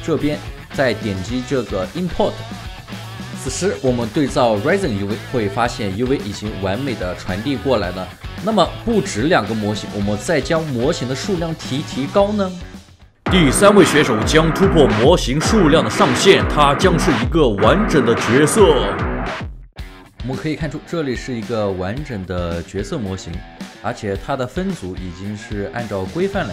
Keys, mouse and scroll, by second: 0.6 alt+right click, 1.0 alt+middle click, 3.3 alt+right click, 3.8 alt+middle click, 3.9 alt+right click, 4.6 alt+middle click, 6.4 alt+right click, 20.9 alt+middle click, 22.7 alt+click.